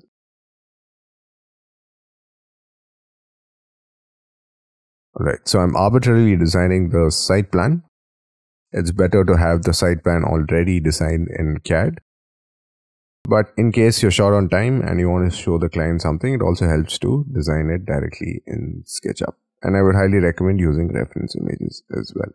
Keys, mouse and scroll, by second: 0.6 shift+click, 0.8 shift+middle click, 1.1 middle click, 1.2 scroll up 5, 1.4 shift+middle click, 1.6 middle click, 1.6-3.3 typing, 4.1 shift+click, 4.1 shift+scroll down 5, 4.3 Escape, 4.6 Escape, 4.7 middle click, 5.8 space, 5.9-6.5 scroll down 9, 6.9 middle click, 8.0-8.6 scroll down 10, 9.5 middle click, 11.9 middle click, 12.4 middle click, 13.1 middle click, 16.2 scroll up 5, 16.8 middle click, 17.2 scroll down 5, 17.7-18.5 scroll up 10, 18.6-19.2 scroll down 5, 19.3-20.0 scroll up 14, 20.2 middle click, 22.2 scroll down 1.